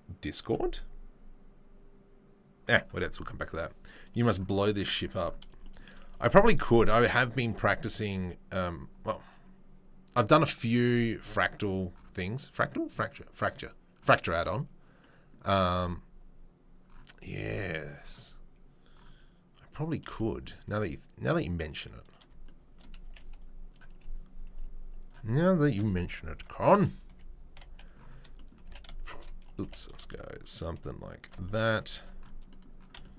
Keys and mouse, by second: 21.3-22.2 drag, 22.2-23.7 shift+middle drag, 23.7-27.5 right drag, 25.0 click, 25.0 middle click, 25.7 KP_3, 26.3 ctrl+KP_1, 27.0 KP_3, 27.5 KP_1, 28.6 g, 29.4 click, 29.5 right click, 29.6 g, 31.7-33.1 right drag, 31.7 z.